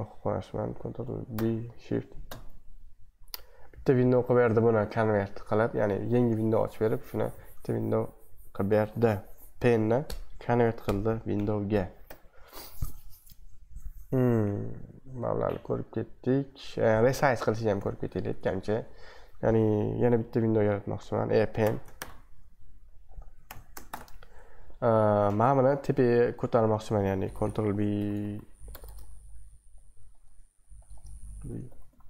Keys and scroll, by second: 1.3 ctrl+b, 2.3 shift+1, 12.1 super+2, 17.8 super+2, 18.1 super+1, 21.6 ctrl+b, 21.9 shift+5, 23.4 ctrl+b, 23.9 shift+', 27.7 ctrl+b, 27.9 ctrl+Up, 28.1 ctrl+Up, 28.7-30.9 typing, 31.4 ctrl+b, 31.6 ctrl+b, 31.9 ctrl+Up.